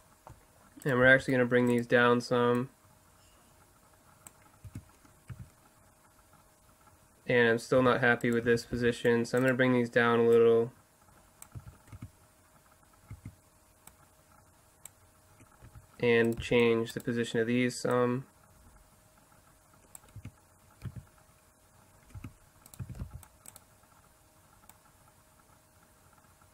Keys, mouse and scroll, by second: 0.0 middle click, 0.9-4.4 drag, 1.0 c, 1.7-2.8 right drag, 4.7 Tab, 5.3 z, 7.8 Tab, 8.5 z, 8.8 c, 10.4 click, 11.4 click, 11.6 z, 11.9 Tab, 13.1 Tab, 13.9-15.7 drag, 15.7 z, 16.6 c, 16.6 right click, 18.1-19.6 drag, 20.2 Tab, 20.9 z, 22.2 Tab, 22.8 z, 23.1 c, 23.5 middle click, 26.0 click.